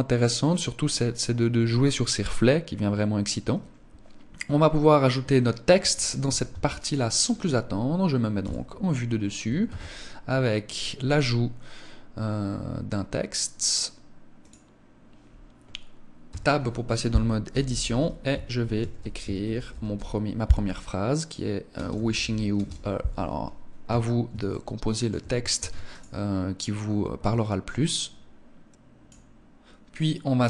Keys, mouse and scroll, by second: 5.5 Escape, 6.3 ctrl+s, 8.2 KP_7, 9.4 shift+a, 16.0 Tab, 17.3-19.7 typing, 21.5 space, 21.7 y, 22.3 space, 22.4 a, 23.6 Tab, 24.3 shift+middle click, 25.3 ctrl+s.